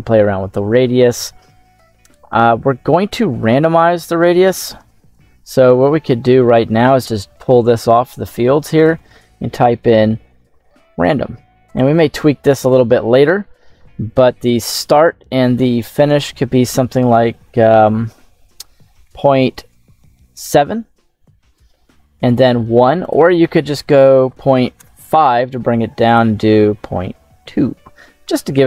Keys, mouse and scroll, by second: 3.5 middle click, 5.0 click, 6.5-11.6 drag, 12.5 click, 14.0-15.6 scroll down 1, 16.0-20.0 drag, 22.9-24.7 drag, 25.9-27.2 drag.